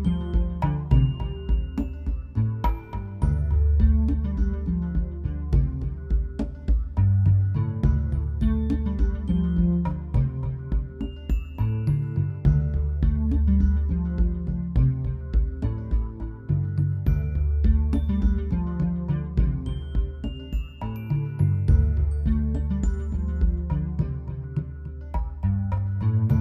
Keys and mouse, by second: 0.2 z, 6.6 z, 7.3 click, 7.8 z, 9.2-9.8 drag, 10.1 click, 10.4 click, 11.2 middle click, 11.5 z, 12.8 middle click, 13.3 z, 14.2 middle click, 15.1 click, 16.4 ctrl+s, 17.3 z, 17.6 z, 18.4 ctrl+z, 20.4 ctrl+s, 23.6-26.4 typing, 24.5 middle click.